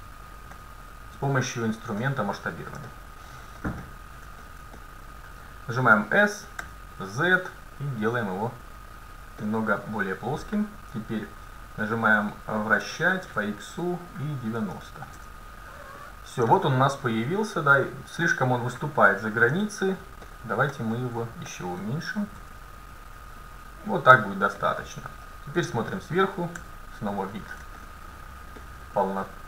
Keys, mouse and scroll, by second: 1.2 KP_1, 1.4-2.9 middle drag, 4.8-6.7 middle drag, 5.8 s, 13.0 r, 16.0-18.4 middle drag, 19.2 KP_1, 19.5 z, 20.8-23.5 middle drag, 22.4 s, 24.2-26.1 drag, 24.7-26.0 middle drag, 25.3 KP_7, 26.6 z, 29.3-29.4 middle drag.